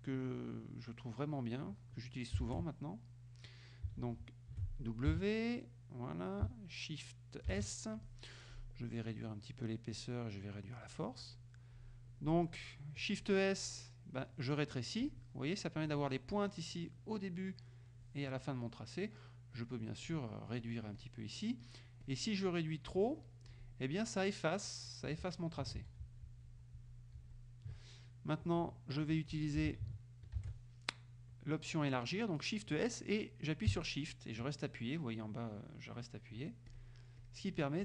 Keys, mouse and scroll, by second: 2.5 shift+s, 5.2 w, 7.5 shift+s, 9.2 click, 10.0 click, 15.1 click, 15.9 click, 16.7 click, 19.6 click, 20.1 click, 20.7 click, 21.0 click, 21.7 click, 22.1 click, 22.5 click, 24.2 click, 25.8 ctrl+z, 29.6 w, 30.5 shift+s, 36.7 shift+click, 37.2 shift+click.